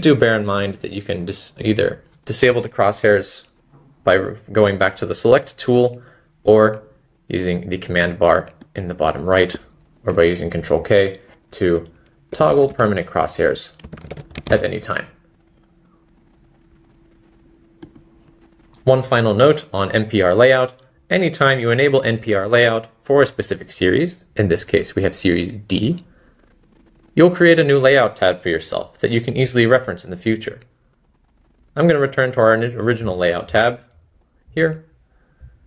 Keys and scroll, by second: 2.5 ⟲, 17.0-17.9 typing.